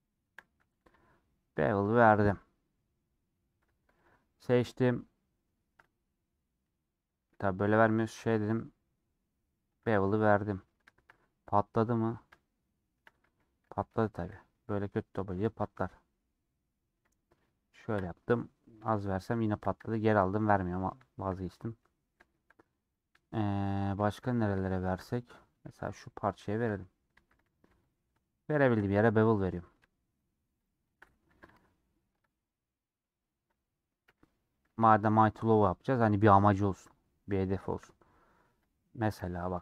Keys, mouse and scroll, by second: 0.0 shift+click, 0.4 middle click, 0.8 ctrl+b, 2.2-3.3 middle drag, 3.3 scroll up 1, 3.5 Tab, 3.9-5.5 alt+drag, 5.5 ctrl+b, 7.6 ;, 8.2 ctrl+b, 10.1 middle click, 10.5-11.0 scroll up 1, 11.6-12.3 scroll up 4, 12.3 shift+middle click, 13.3 ctrl+z, 13.6 ctrl+z, 15.1 scroll down 1, 15.4 ctrl+b, 18.3 middle click, 19.0 ctrl+z, 19.3 ctrl+z, 19.8-20.1 scroll down 1, 20.1 middle click, 20.8 scroll down 1, 21.1 shift+middle click, 21.5 click, 21.8-22.9 middle drag, 22.9-23.9 drag, 23.9-24.3 scroll down 1, 24.3 click, 24.7 shift+middle click, 25.1 click, 26.6 /, 27.1 Tab, 28.9-30.6 middle drag, 30.8 shift+click, 31.3 ctrl+b, 32.7-34.1 middle drag, 34.1 /, 34.5-35.0 scroll down 2, 35.0-36.8 shift+middle drag, 36.8 click, 37.7 KP_Decimal, 38.1 Tab, 39.1 /, 39.4 middle click.